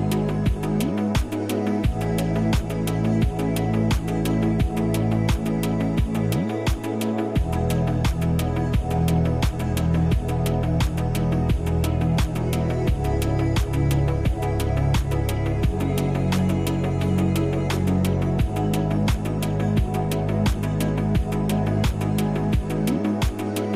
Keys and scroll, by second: 0.8 space, 2.0 space, 2.9 space, 4.3 ctrl+c, 4.4 ctrl+v, 13.0 space, 17.5 space, 19.3 space, 22.0 space.